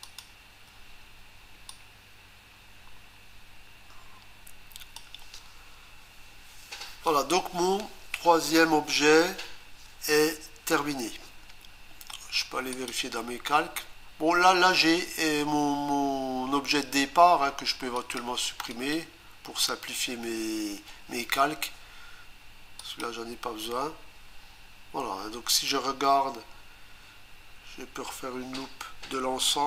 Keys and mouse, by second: 0.0 ctrl+click, 1.7 click, 12.7 click, 18.0 click, 18.7 right click, 22.8 click.